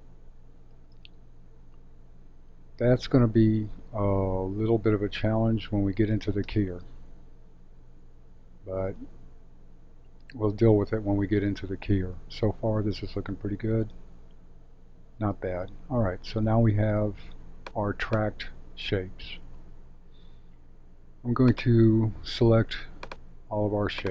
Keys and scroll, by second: 0.7 space, 6.4 space, 15.1 space.